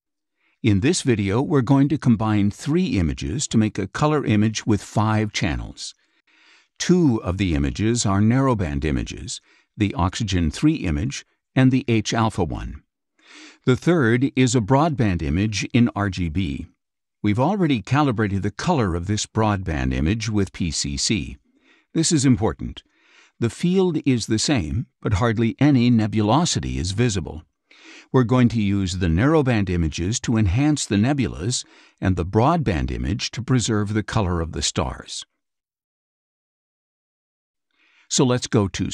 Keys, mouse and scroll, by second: 1.7 click, 3.3 click, 9.5 click, 11.0 click, 16.2 click, 25.2 click, 33.8 click, 34.6 click.